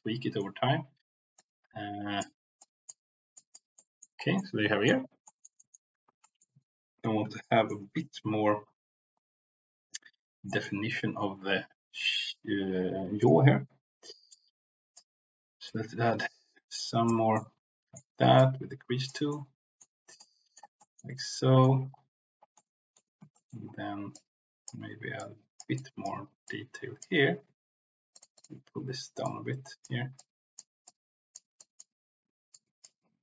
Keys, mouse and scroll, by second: 1.2 click, 2.5 click, 3.3 click, 3.8 middle click, 4.3 middle click, 5.2 middle click, 5.5 middle click, 6.2 middle click, 7.3 shift+middle click, 10.4 middle click, 13.2 click, 14.4 click, 15.6-17.0 drag, 17.3 middle click, 18.3 click, 19.3 middle click, 20.1 middle click, 20.8 shift+middle click, 21.1 middle click, 22.5 middle click, 23.3 shift+middle click, 24.1 middle click, 25.1 click, 25.7 click, 26.4 middle click, 26.7 click, 28.1 click, 28.3 click, 29.2 click, 30.0 click, 30.8 click, 31.5 click, 32.5 click.